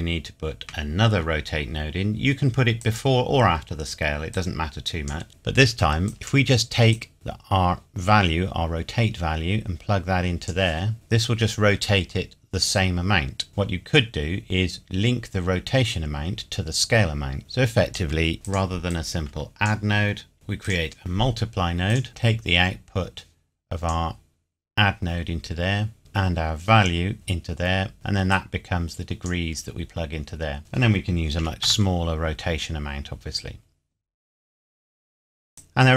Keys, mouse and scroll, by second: 0.7 shift+d, 2.8 click, 6.1 click, 13.5 click, 13.9-15.9 scroll up 1, 17.4 click, 26.0 click, 31.4 KP_1, 31.7 KP_Enter, 35.5 click.